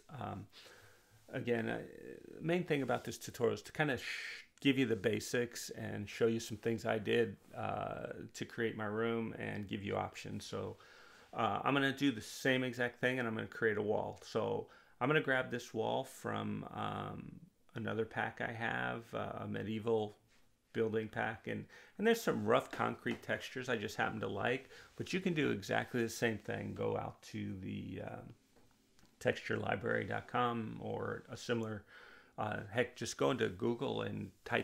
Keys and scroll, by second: 27.8-28.7 typing.